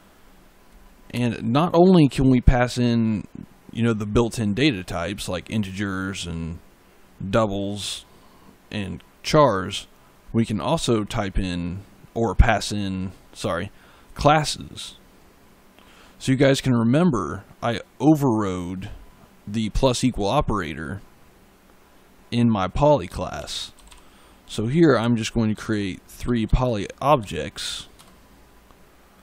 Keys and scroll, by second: 1.0 BackSpace, 23.0-27.5 typing, 27.8 Return.